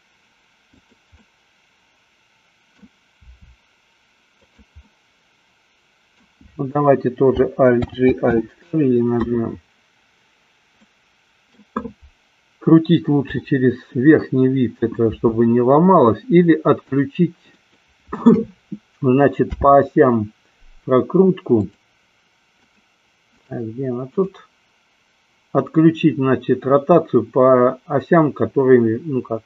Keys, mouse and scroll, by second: 1.3-3.1 middle drag, 3.4 r, 4.8 click, 5.2-6.7 middle drag, 8.2 alt+g, 8.6 alt+r, 11.2 middle click, 13.4 KP_7, 15.2 r, 19.6 n, 21.6 click, 22.6 click, 23.3 click.